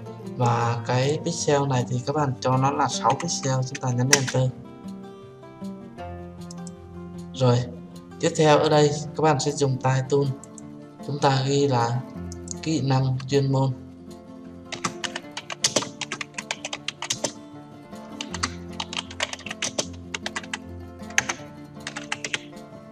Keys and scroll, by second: 4.6 Return.